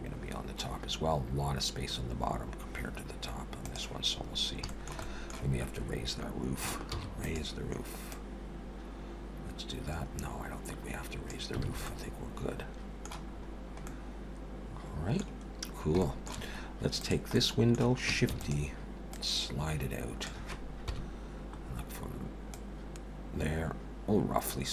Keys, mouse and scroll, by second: 4.3-4.6 scroll down 2, 4.7 shift+middle click, 5.0 middle click, 6.9 shift+d, 8.1 click, 11.6 alt+a, 11.9 middle click, 13.3-14.6 scroll up 4, 13.9 middle click, 15.3-15.6 scroll down 2, 16.0 shift+middle click, 17.0 click, 17.3 middle click, 18.3 shift+d, 19.1 click, 20.9 KP_1, 22.5 click.